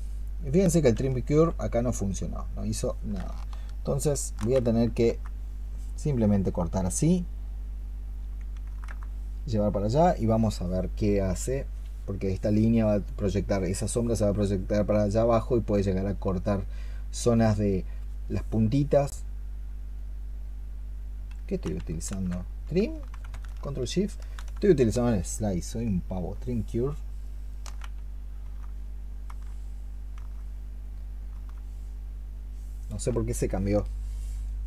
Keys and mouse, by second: 4.2 ctrl+shift+click, 19.0 double click, 22.4 ctrl+z, 26.0 ctrl+shift+click, 27.4 ctrl+shift+click.